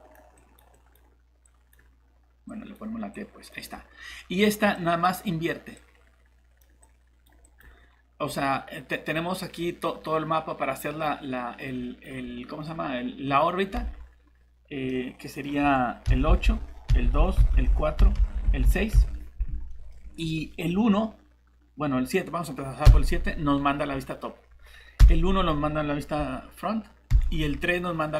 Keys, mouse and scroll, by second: 13.7 alt+Tab, 14.9 middle click, 16.1-18.9 typing, 20.0 scroll up 1, 22.9 7, 25.0 1, 27.1 3.